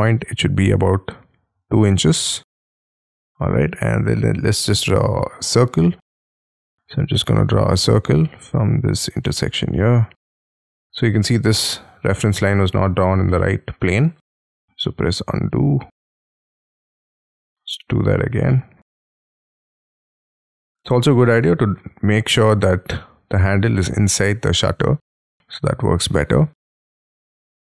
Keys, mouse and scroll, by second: 1.6 2, 2.0 shift+', 2.3 Return, 3.0 middle click, 3.6-4.9 scroll up 10, 4.9-6.7 scroll up 10, 6.7-8.2 scroll up 9, 8.2 Escape, 9.2 middle click, 9.8-10.1 scroll down 6, 10.1 middle click, 12.3-13.3 scroll down 17, 13.3 middle click, 14.4 ctrl+z, 14.8 middle click, 16.3 ctrl+z, 16.4-17.1 ctrl+scroll down 10, 17.3 t, 18.5 middle click, 18.8 scroll down 1, 19.1 scroll up 7, 19.3 scroll down 1, 19.4 scroll up 1, 20.1 middle click, 20.6 scroll down 4, 20.8 space, 21.3 double click, 22.9 middle click, 24.1-25.3 scroll down 7, 25.3 middle click, 26.6-27.7 scroll up 2, 27.7 scroll up 3.